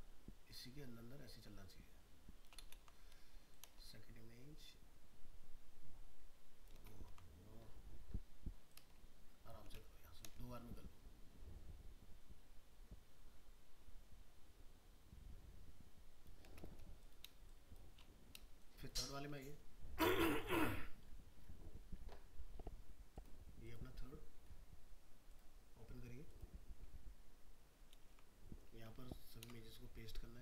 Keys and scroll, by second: 2.7 ctrl+z, 7.1 ctrl+z, 29.4 ctrl+v.